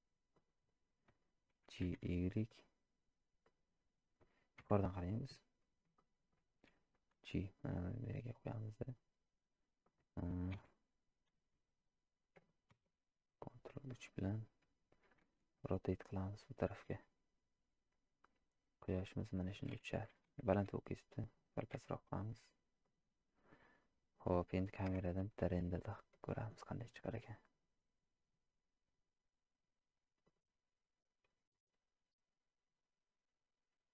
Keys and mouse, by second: 4.6 KP_7, 6.0-6.4 shift+middle drag, 7.3 g, 9.0-10.0 middle drag, 11.3 KP_3, 15.3 r, 21.9 r, 23.8-24.2 middle drag, 25.9 z, 30.5 drag.